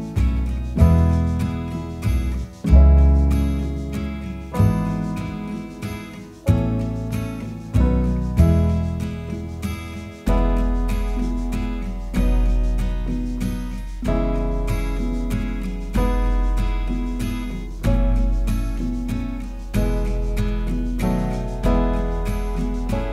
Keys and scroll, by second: 3.8 super+d, 5.2 super+d, 7.7 0, 7.9 Tab, 8.0 0, 8.2 Tab, 8.4 0, 9.0 Return, 11.4 super+d, 13.4-14.2 typing, 15.5 1, 16.5 2, 17.7 8, 19.9 super+d.